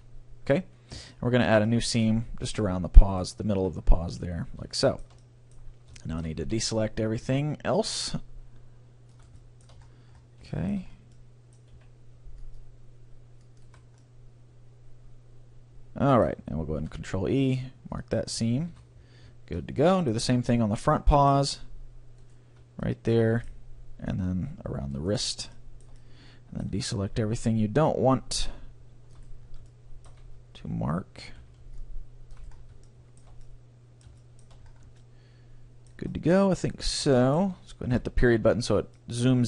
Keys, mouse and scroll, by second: 0.6-3.4 middle drag, 3.2-5.0 right drag, 3.8 middle click, 4.8-6.3 middle drag, 6.6 c, 9.4-13.0 middle drag, 11.8 c, 13.8-15.6 right drag, 14.0-15.8 middle drag, 16.8 ctrl+e, 18.4-21.5 middle drag, 18.8 a, 22.3-24.7 middle drag, 22.3-23.9 right drag, 25.0-26.7 right drag, 25.6-27.9 middle drag, 26.9 c, 29.4-31.4 middle drag, 30.2 x, 31.4 c, 32.6-37.7 middle drag, 38.0 KP_Decimal, 38.7 middle click.